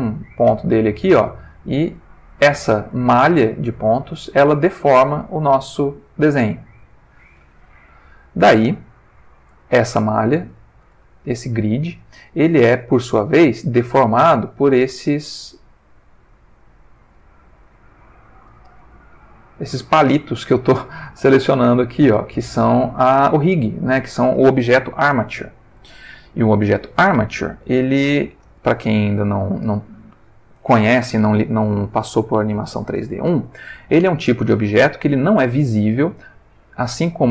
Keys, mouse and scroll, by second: 0.0 g, 1.3 Escape, 1.8 click, 2.0 g, 2.6 Escape, 3.4 click, 4.2 g, 6.8 Escape, 7.4 Tab, 7.9 ctrl+middle click, 9.6 click, 10.4-11.7 ctrl+middle drag, 12.8 click, 13.9 r, 16.8 Escape, 17.5 click, 18.6 r, 21.2 Escape, 22.2 click, 23.0 r, 23.8 Escape, 26.4 ctrl+middle click, 28.7-29.4 ctrl+middle drag, 36.1 ctrl+middle click, 37.1 ctrl+click.